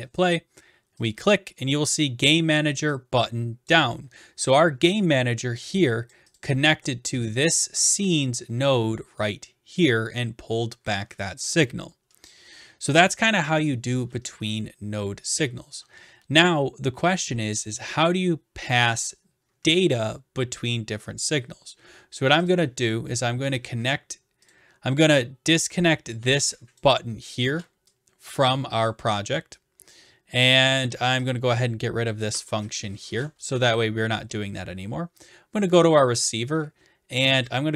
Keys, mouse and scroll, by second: 1.1 click, 3.7 click, 4.8 scroll down 2, 6.1 click, 6.4 click, 7.2 click, 13.2 click, 18.6 click, 22.5 click, 24.5 click, 26.7 click, 27.4 BackSpace, 28.9-29.9 drag, 32.2-33.4 drag, 32.3 BackSpace, 33.6 ctrl+s, 35.3-36.4 drag, 37.5-37.7 drag.